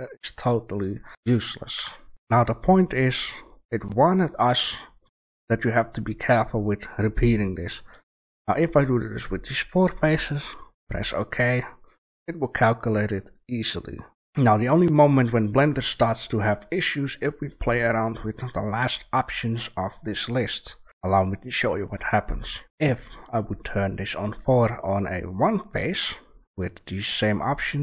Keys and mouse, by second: 1.1 Delete, 1.5 click, 1.7 Delete, 2.1 Delete, 2.1 shift+a, 14.2 a, 16.7 click, 17.6 shift+a.